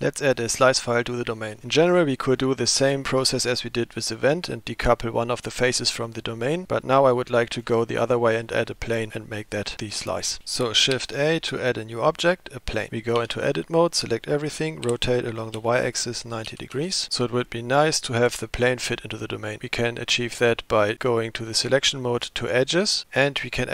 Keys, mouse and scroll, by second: 11.0 shift+a, 13.2 Tab, 14.9 r, 22.2 click.